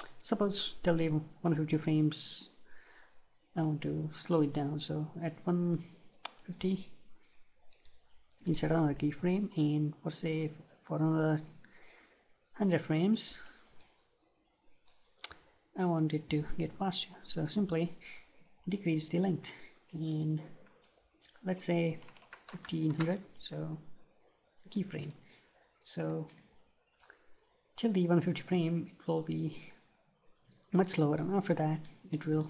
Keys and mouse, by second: 5.9-15.7 right drag, 17.6-23.0 drag, 24.6-32.4 right drag.